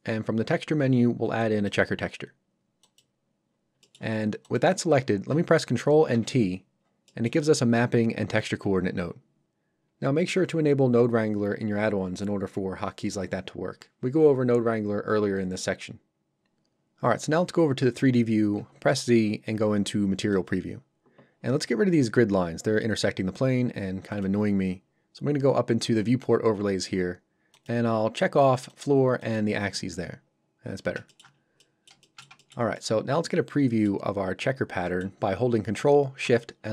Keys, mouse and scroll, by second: 1.4 click, 3.5-3.8 scroll up 1, 3.8 middle click, 4.5 click, 6.1 ctrl+t, 6.8 scroll down 1, 7.1 middle click, 20.3 click, 27.5 click, 30.6 scroll up 1, 31.1 shift+middle click, 31.3 scroll down 1, 32.0 shift+middle click, 32.4 ctrl+middle click, 32.7 middle click.